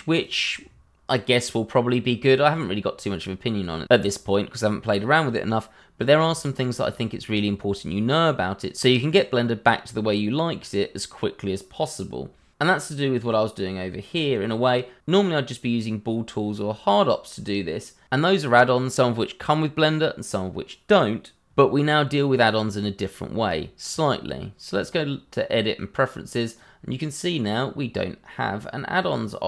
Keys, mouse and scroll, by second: 2.5 click, 8.0 middle click, 23.9 click, 29.0 click.